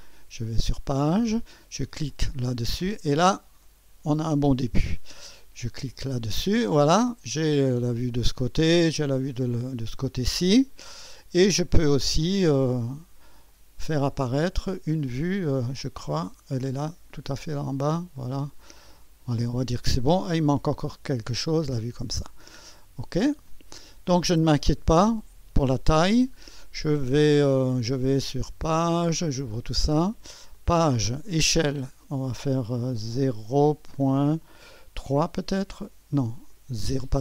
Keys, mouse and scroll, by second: 0.0-1.1 drag, 2.1-3.1 drag, 5.8 click, 8.7 click, 13.5 click, 14.2-16.0 scroll down 2, 16.0-16.7 scroll down 1, 16.7-17.2 scroll down 1, 17.2 click, 18.2 middle click, 18.5-20.3 drag, 20.9-22.0 drag, 23.1 click, 24.0-25.4 scroll down 1, 26.4-27.4 scroll down 1, 27.7-28.7 scroll down 1, 28.7 click, 29.1-29.7 scroll down 1, 30.5 click, 31.5-33.3 drag, 33.4 0, 34.0 ., 35.0 KP_3, 36.5-37.2 drag.